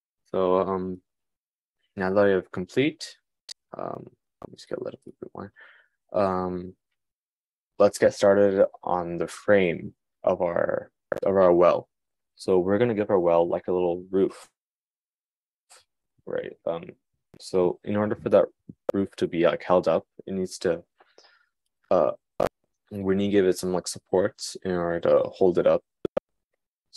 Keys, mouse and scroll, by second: 3.9 click, 20.6 click, 22.8 shift+a.